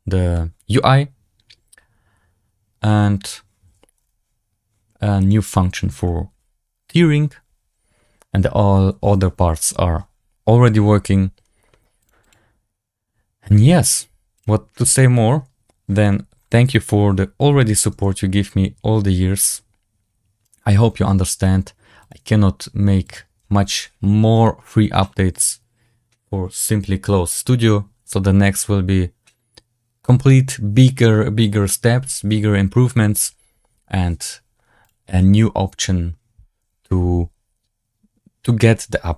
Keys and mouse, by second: 3.9 z, 5.1 click, 5.4 click, 11.9 click, 12.1 click, 14.3 click, 14.8-16.0 middle drag, 20.4 right click, 22.0-34.8 drag.